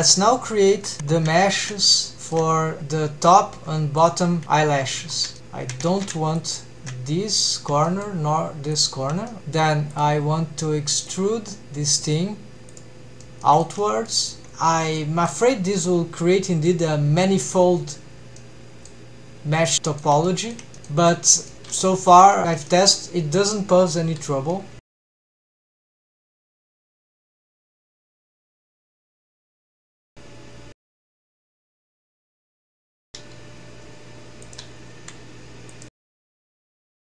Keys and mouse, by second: 0.8 Tab, 1.4 shift+middle click, 1.8 middle drag, 2.2 shift+middle click, 2.8 2, 5.4 shift+2, 5.9 ctrl+z, 6.4 shift+click, 6.9 middle click, 7.9 shift+middle click, 8.8 shift+click, 9.3 middle click, 10.1-11.4 drag, 12.2-13.1 drag, 13.2 middle drag, 13.4 middle click, 13.8-14.1 middle drag, 15.0 middle click, 16.4 middle click, 18.4-18.9 middle drag, 19.6-20.0 middle drag, 20.3 shift+middle drag, 20.7 middle click, 21.1-21.5 middle drag, 21.9 shift+middle drag, 22.4 middle drag, 22.7 shift+middle click, 25.3 e, 27.1 click, 27.3 middle click, 28.3 middle click, 29.2 r, 29.4 z, 31.9-32.3 middle drag, 32.6 middle click, 33.2 g, 34.5 click, 34.9 r, 36.1 middle click, 36.8 g.